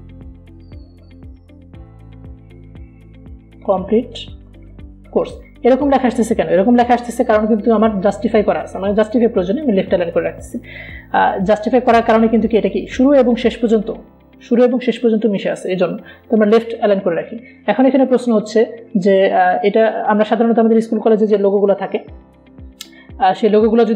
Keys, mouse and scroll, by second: 0.0-3.6 typing, 4.6-7.0 typing, 8.0 ctrl+a, 9.8 click, 18.0 click.